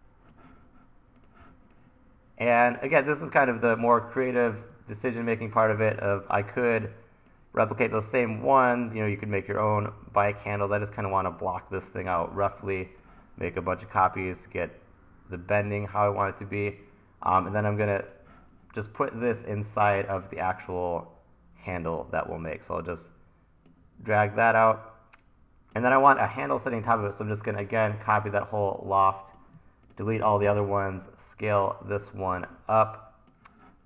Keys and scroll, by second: 0.5 super+z, 1.4 t, 5.8 e, 21.8 w, 30.4 BackSpace, 32.4 t.